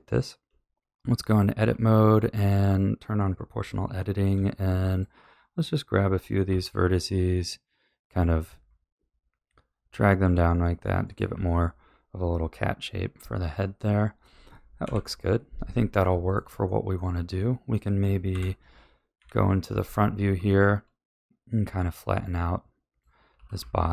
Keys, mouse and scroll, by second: 1.5 1, 2.3 click, 3.6 o, 4.9 shift+click, 6.4 g, 11.3 a, 13.0 KP_3, 14.8 KP_1, 16.0-18.3 shift+middle drag, 18.3 KP_7, 19.1 KP_1, 19.6 z, 21.6 b, 23.3 s.